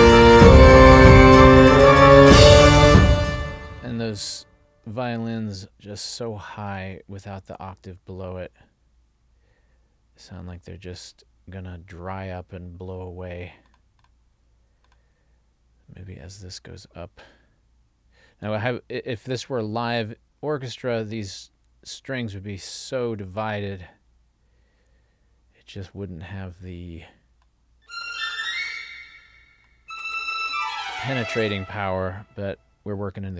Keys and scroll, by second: 2.9 space.